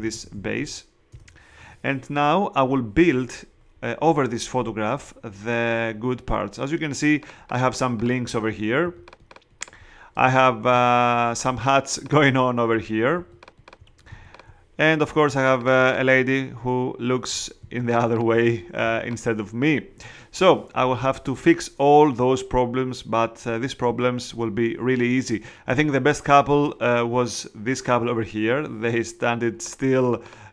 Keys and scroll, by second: 0.0-0.8 typing, 1.1 Return, 10.1 alt+space, 10.8 space.